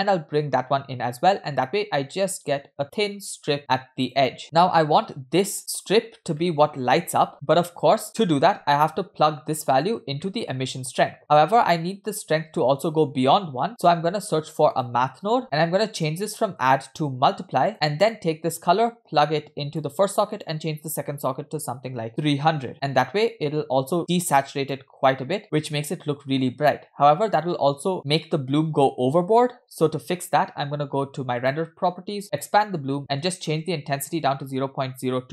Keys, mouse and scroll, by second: 4.4-5.6 middle drag, 4.4 scroll down 2, 5.6-6.3 scroll up 4, 6.5-6.8 middle drag, 7.0 space, 7.8 scroll down 2, 8.0 middle click, 8.5-8.8 scroll down 1, 8.9 middle click, 10.2 middle click, 11.1 scroll down 2, 11.2 middle click, 11.3-12.3 scroll up 2, 12.3-12.9 scroll up 1, 14.0 shift+a, 16.6-17.7 drag, 18.2-19.9 drag, 20.3-22.7 drag, 22.3 0, 23.0 scroll down 2, 23.2 middle click, 24.0 click, 25.1-25.6 scroll up 2, 27.1-27.6 scroll down 2, 27.9 middle click, 27.9-28.3 scroll down 2, 31.4 click, 32.3 click, 33.2-35.2 drag.